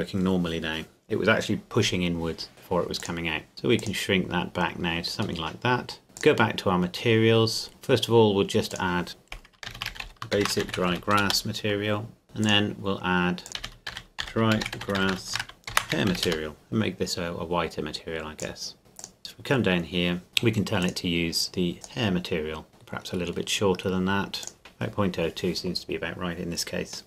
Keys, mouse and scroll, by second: 3.0 click, 5.4 middle click, 6.2 click, 9.7-10.7 typing, 11.2 Return, 12.2 click, 13.6-16.1 typing, 16.2 Return, 16.5-17.5 drag, 18.4 click, 19.2-20.8 scroll down 1, 20.8 click, 22.7 middle click, 24.4 click, 24.6 KP_Enter.